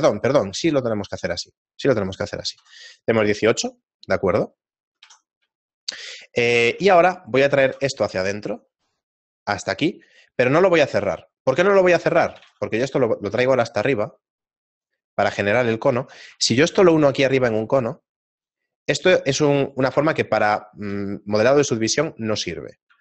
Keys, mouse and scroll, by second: 2.5 F6, 5.0 F6, 6.4 right click, 6.7 Tab, 7.6 e, 8.0 s, 11.4 shift+middle click, 14.1 g, 15.0 middle click, 15.7 shift+middle click, 16.7 alt+m, 19.0 middle click, 19.7 right click, 22.9 Tab.